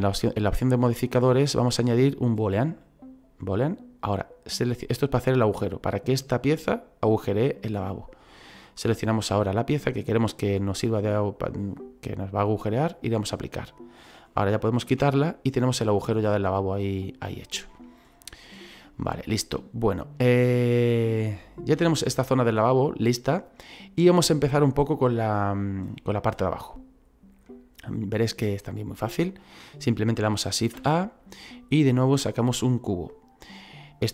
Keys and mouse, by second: 1.2 click, 2.6 click, 8.8 click, 9.9 click, 13.0 click, 14.0 right click, 16.0 middle click, 17.7 middle click, 18.5 middle click, 20.5 middle click, 24.5 shift+middle click, 26.2 shift+middle click, 27.5 middle click, 30.7 shift+a, 32.4 click.